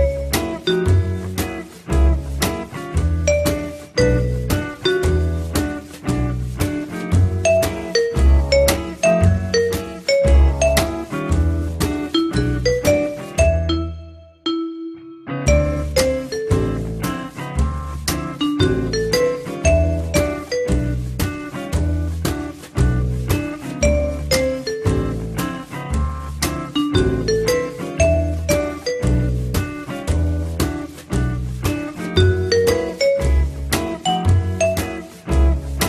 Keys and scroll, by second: 11.1-12.0 typing, 13.5 f, 24.9 F3, 26.0 p, 26.8 z, 33.8 4, 35.4 Delete.